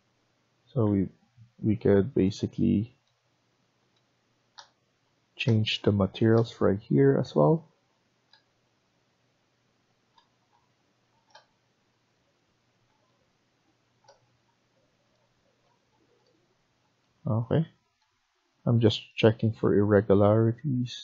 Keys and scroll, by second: 0.8 Escape, 1.1 Escape, 2.6 Escape.